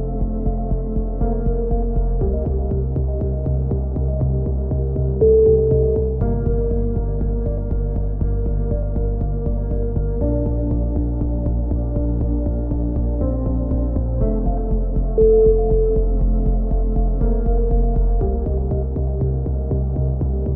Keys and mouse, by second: 0.0 ctrl+z, 0.4-2.7 drag, 2.7 ctrl+z, 3.3 click, 4.3 click, 5.4 right click, 6.0 ctrl+z, 6.0 click, 6.3-7.3 drag, 8.3 click, 9.1 a, 9.2 z, 9.4 middle click, 9.7 click, 12.1-13.5 drag, 13.2 KP_7, 13.5 z, 14.1 e, 14.8 click, 17.2 s, 18.3 click, 19.1 middle click, 19.5 click.